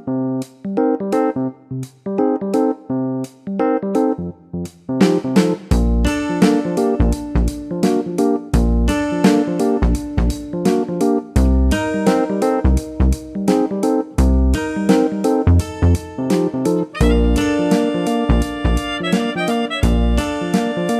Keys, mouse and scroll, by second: 1.8 click, 2.1 double click, 3.1 BackSpace, 3.9 4, 5.6 click, 6.9 click, 8.7 click, 16.5 click.